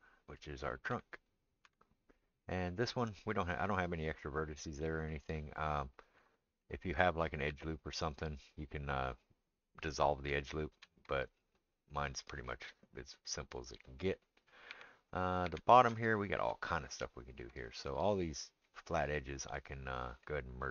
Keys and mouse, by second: 0.9 Tab, 1.6 Tab, 7.5 ctrl+r, 10.7 ctrl+z, 14.7 Tab, 15.1 click, 15.2-20.7 middle drag, 15.4 Tab.